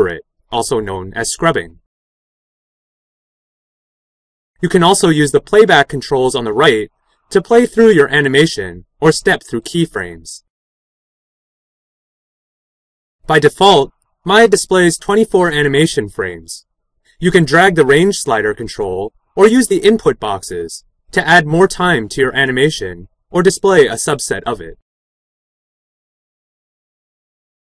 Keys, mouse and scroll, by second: 17.5-25.4 drag.